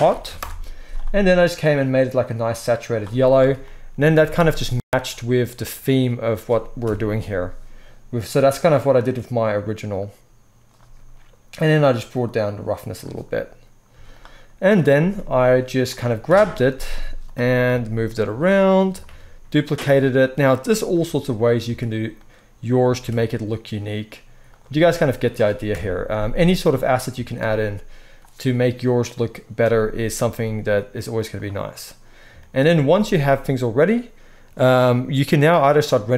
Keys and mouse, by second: 1.8-8.3 middle drag, 3.6 Tab, 4.1 z, 6.8 KP_0, 8.3 click, 8.5-12.2 middle drag, 12.2-14.1 drag, 13.8 z, 14.1-35.5 middle drag, 14.9 s, 16.2 KP_7, 16.9 z, 18.2 g, 19.8 shift+d, 20.8 r, 21.6 s, 23.7 shift+d, 25.7 KP_0, 27.1 z, 30.2 z, 32.9 ctrl+s.